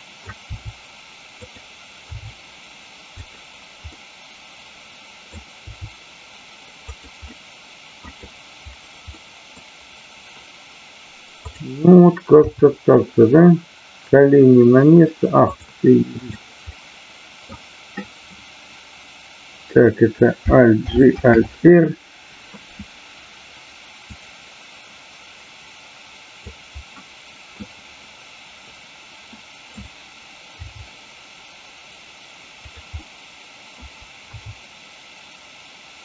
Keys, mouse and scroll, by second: 0.5 r, 1.4 click, 2.0 g, 3.2 click, 3.9-5.2 middle drag, 6.9 click, 7.3 middle click, 9.1 middle click, 11.3 click, 16.1 click, 16.6 middle click, 21.3 alt+r, 24.0-26.5 drag, 27.0 middle click, 29.2 scroll up 1, 29.4 middle click, 33.0-33.8 middle drag.